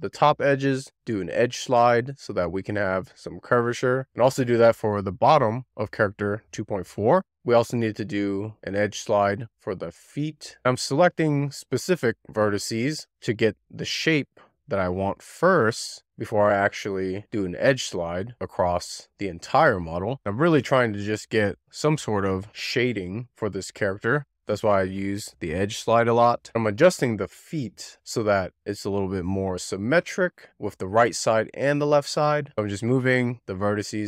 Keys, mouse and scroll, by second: 0.2 shift+click, 0.4 shift+click, 0.7 z, 1.0 middle click, 1.1 click, 3.9 middle click, 4.2 click, 4.6 middle click, 4.8 scroll up 3, 4.9 middle click, 5.2 middle click, 5.3 click, 5.6 middle click, 5.9 click, 6.3 shift+middle click, 6.4 scroll up 1, 6.6 click, 6.7 middle click, 6.9 click, 7.1 scroll down 2, 7.4 middle click, 8.0 shift+middle click, 8.3 scroll up 1, 8.4-8.9 scroll down 1, 9.7 middle click, 9.9 scroll up 1, 10.1 shift+click, 10.2 shift+middle click, 10.3 shift+click, 10.5 middle click, 10.5 click, 11.1 x, 11.3 scroll down 1, 11.4 middle click, 12.3 click, 12.5 x, 12.7 middle click, 12.9 scroll up 2, 13.0 middle click, 13.4 ctrl+click, 13.6 middle click, 13.7-14.2 scroll down 1, 14.2 click, 15.3 scroll up 2, 15.5 shift+middle click, 16.1 click, 16.3 click, 16.4 1, 16.5 scroll up 1, 16.7 middle click, 17.1 click, 17.2 click, 17.4 middle click, 18.0 scroll down 2, 18.1 middle click, 18.3 click, 18.4 middle click, 18.6 scroll up 1, 18.8 click, 19.0 middle click, 19.2 click, 19.5 middle click, 20.0 click, 20.1 middle click, 20.8 middle click, 21.1 click, 21.3 z, 21.4 middle click, 21.6 click, 22.0 click, 22.0 middle click, 22.9 click, 23.0 click, 23.6 scroll down 1, 23.9 click, 25.5 click, 25.8 scroll up 1, 26.0 scroll down 2, 26.2-26.5 scroll up 1, 26.5 click, 26.7 middle click, 26.9 2, 27.1 middle click, 27.3 middle click, 27.4 scroll down 1, 27.6 shift+middle click, 27.8 click, 27.9 shift+middle click, 28.0 click, 28.7 middle click, 29.4 right click, 29.5 click, 29.6 click, 29.8 click, 30.0 click, 30.1 k, 30.3 click, 30.4 middle click, 31.0 k, 31.2 middle click, 31.4 click, 31.8 middle click, 31.9 click, 31.9 middle click, 32.8-33.8 typing, 33.2 right click, 34.0 middle click.